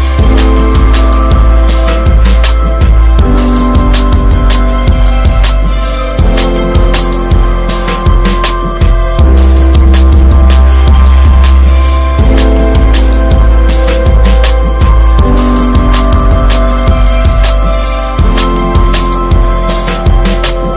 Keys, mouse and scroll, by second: 0.0-1.1 shift+middle drag, 1.1 s, 3.4 ctrl+z, 3.7 s, 5.4 shift+middle click, 5.9 click, 6.3 shift+middle click, 7.0 y, 7.8 ctrl+z, 8.7 s, 10.9 scroll down 2, 11.1 middle click, 11.4 Tab, 11.5 click, 11.7-12.9 middle drag, 12.9 click, 13.8 click, 14.0 Tab, 14.3 alt+z, 14.9 alt+z, 15.4 1, 16.8 ctrl+r, 18.8 Tab, 19.3 Tab, 20.1 ctrl+r.